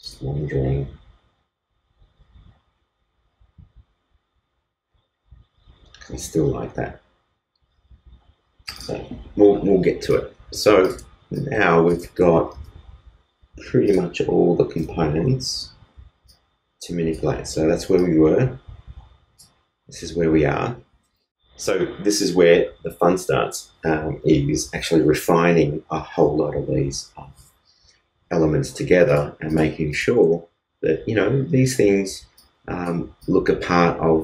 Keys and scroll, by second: 12.4 super+s.